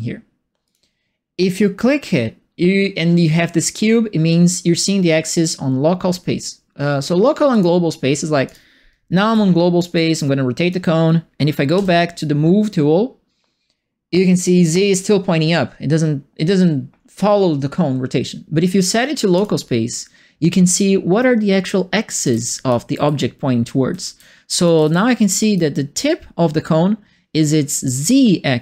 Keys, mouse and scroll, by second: 0.6 click, 7.5 click, 8.4 click, 9.2 e, 9.9 click, 11.7 w, 19.3 click, 21.6-25.5 right drag, 21.9-25.7 typing.